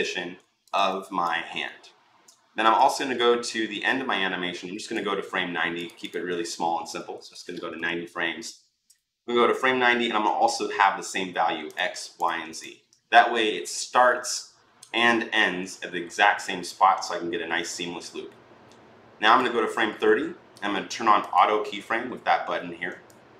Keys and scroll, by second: 6.7-7.6 typing.